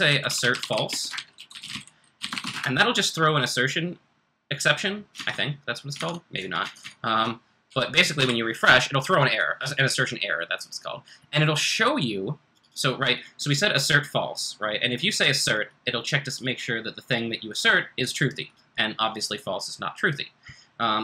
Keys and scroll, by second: 0.0-2.9 typing, 5.1 super+Tab, 5.9 super+Tab, 6.6 super+Tab, 7.2 super+Tab, 8.1 r.